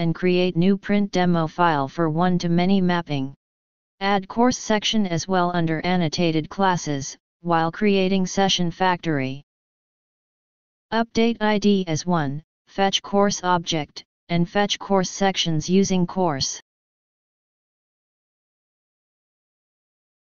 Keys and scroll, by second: 6.7 ctrl+c, 9.0 ctrl+shift+o.